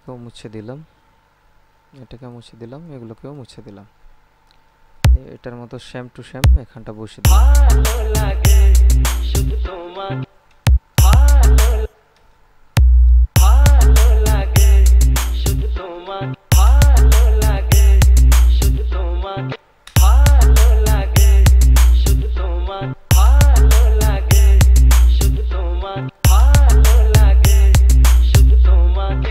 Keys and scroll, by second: 7.4 space, 10.5 space, 13.5 space, 16.5 space, 19.8 space, 23.1 space, 26.2 space.